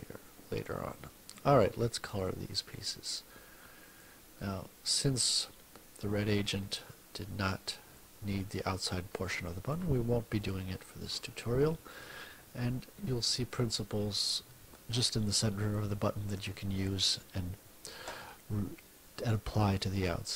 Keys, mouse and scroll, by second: 2.2-4.2 drag, 8.0-9.9 ctrl+drag, 11.9 click, 13.2 click.